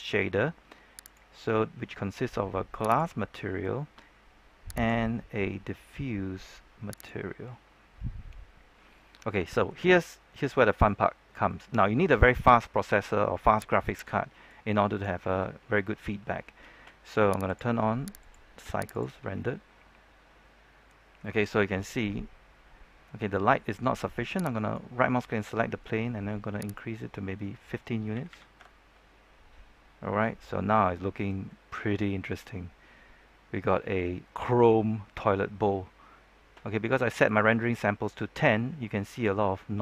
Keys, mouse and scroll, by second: 9.1 scroll up 1, 9.4 shift+middle click, 10.1-10.5 scroll down 1, 10.5-11.0 scroll up 1, 11.4 shift+middle click, 13.7 click, 21.4-22.3 scroll up 1, 22.6-23.2 scroll down 1, 24.5 right click, 26.6 click, 28.1 KP_1, 29.8 Return, 29.8 scroll up 1, 32.1 KP_Enter.